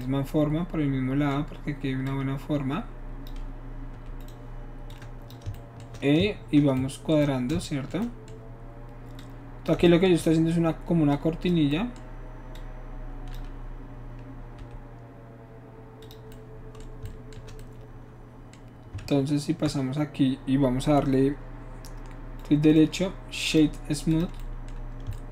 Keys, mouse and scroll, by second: 2.1-3.3 drag, 4.2 e, 4.3 right click, 4.9 click, 9.2 shift+click, 9.9 shift+middle click, 10.2 shift+middle click, 11.1 shift+click, 11.8 shift+middle click, 12.6 click, 14.7 e, 16.1 click, 17.1 shift+middle click, 19.0 ctrl+Tab, 22.4 right click, 23.5 click, 24.1 click, 24.4-25.3 middle drag.